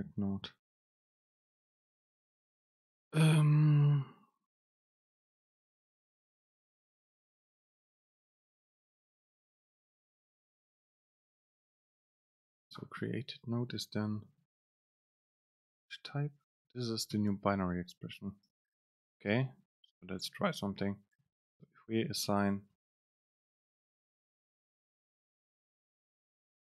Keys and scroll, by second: 14.4 super+space, 16.1 ctrl+shift+super+t, 17.6 Right, 19.2 BackSpace, 21.7 super+space, 26.1 super+space.